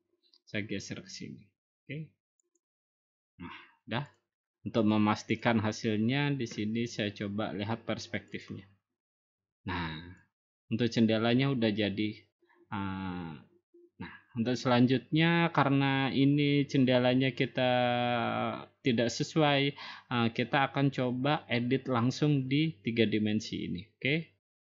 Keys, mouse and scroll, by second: 2.6 click, 4.1 click, 4.9 click, 5.4 click, 8.4 click, 11.0 click, 11.2 middle click, 11.3 middle click, 11.5 scroll down 5, 11.8-12.6 scroll up 7.